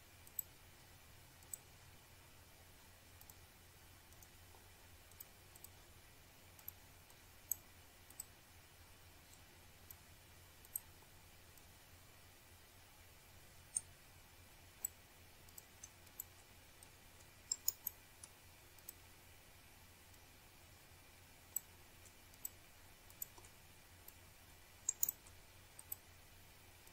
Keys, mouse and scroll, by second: 3.0 click, 8.0 Return, 9.8 click, 11.4 click, 12.5 click, 13.0 scroll up 1, 13.1 click, 14.2 click, 15.1 click, 16.0 click, 16.4 click, 16.5 double click, 17.4 click, 18.9 click, 20.0 click, 21.3 click, 21.8-22.2 scroll down 1, 22.2 click, 25.9 click, 26.5 shift+click.